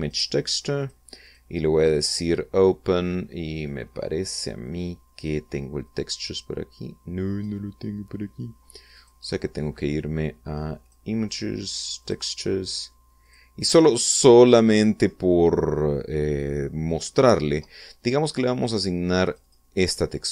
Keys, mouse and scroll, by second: 0.6 click, 1.4 click, 1.8 click, 5.2-6.0 drag, 6.4-8.2 drag, 9.6 click, 11.4 click, 12.6 click, 13.8 click, 15.5-17.2 scroll down 3, 19.8 click.